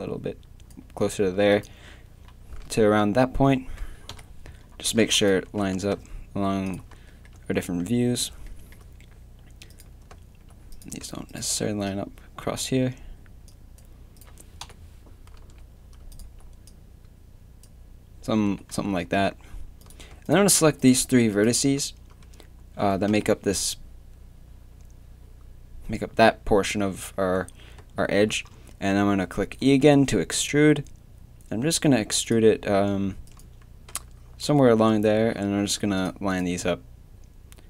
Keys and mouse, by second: 1.6-4.1 drag, 2.6 z, 4.1 KP_3, 5.5 g, 14.6 KP_7, 15.4 z, 18.4 z, 18.7 a, 23.1 KP_3, 28.3-29.6 middle drag, 29.6 e, 33.3-34.5 drag, 34.5 z, 35.2 g, 36.3 click, 36.5 g.